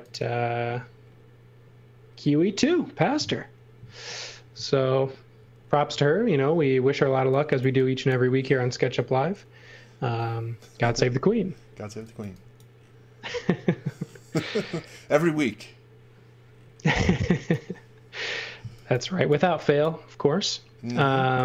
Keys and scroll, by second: 5.4 x, 7.1 x, 7.6 v, 12.0 x, 12.2 v, 16.8 x, 18.4-19.5 typing, 21.3 l.